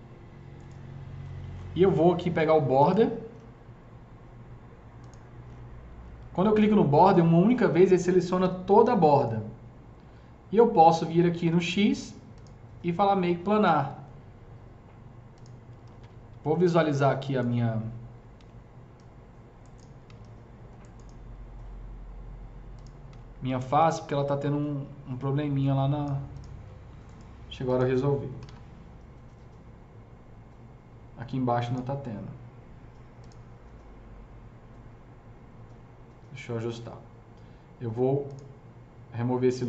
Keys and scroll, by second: 8.3 g, 15.6-16.6 typing, 18.0-18.7 typing, 23.2 s, 28.1-28.9 typing.